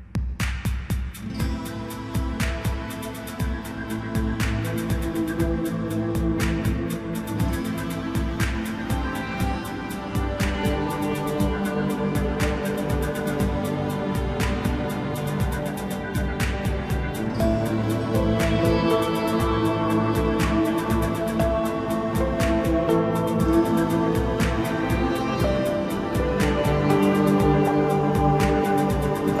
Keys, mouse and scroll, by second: 2.4-3.6 scroll up 5, 3.6-6.6 drag, 6.6-6.9 scroll up 1, 6.9-7.6 scroll down 3, 7.6 KP_1, 8.6 s, 11.5-12.1 middle drag, 12.1-12.5 scroll up 2, 12.5 Tab, 13.3 3, 13.8 click, 14.9 x, 16.2-17.7 middle drag, 17.7 KP_1, 18.2 Tab, 18.7-19.9 middle drag, 19.9 ctrl+a, 21.1 Tab, 21.5-22.0 scroll up 1, 22.0 2, 22.5 click, 22.7 click, 23.7 ctrl+b.